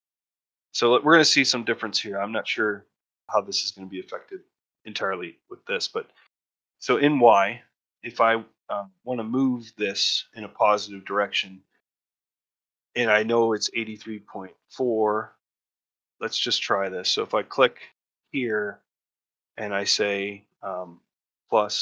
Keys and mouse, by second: 0.4 click, 17.2-21.8 drag.